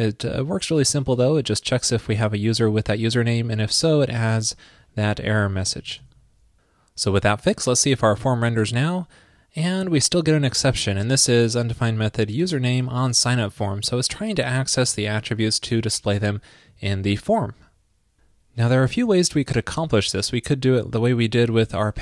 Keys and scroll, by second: 6.1 super+s.